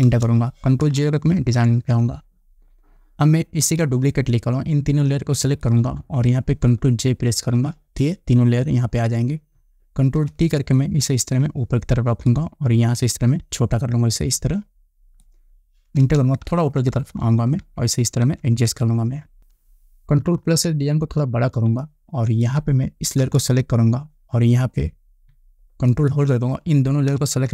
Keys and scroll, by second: 0.6 Return, 1.9 ctrl+0, 8.0 ctrl+j, 10.7 ctrl+t, 16.6 Return, 21.2 ctrl+=.